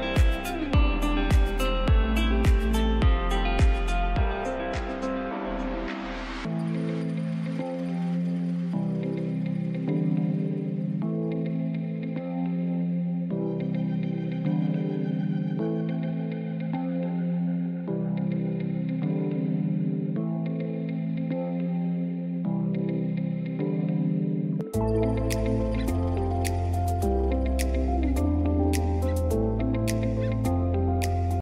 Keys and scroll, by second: 0.8 F3, 6.8 F2, 7.6 shift+Page_Up, 14.2 c, 14.8 Escape, 15.1 F4, 15.8 F3, 29.0 shift+F2, 29.9 F9.